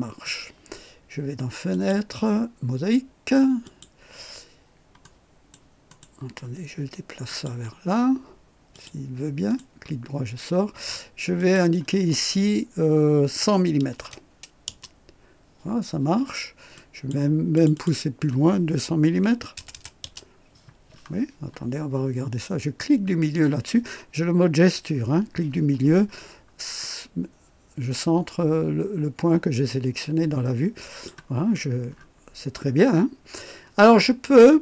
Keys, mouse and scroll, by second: 1.7 click, 3.6 click, 5.0-5.7 right drag, 5.9 right click, 7.2 click, 8.7 click, 9.4 right click, 11.4 click, 13.4 KP_1, 13.8 KP_0, 14.6 Return, 16.7 click, 17.5 click, 19.1 KP_2, 19.5 KP_0, 20.0 Return, 22.8 click, 26.1-26.4 scroll up 1, 26.8-31.2 drag, 31.4-32.2 scroll up 2, 32.9-33.2 scroll down 1, 33.9-34.6 scroll down 4.